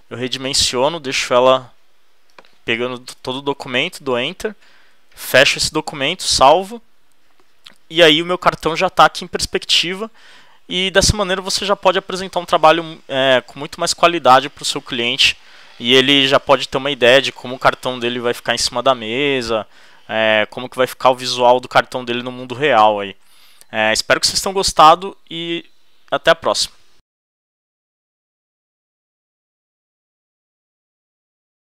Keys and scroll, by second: 3.1 alt+shift+Return, 4.9 super+w.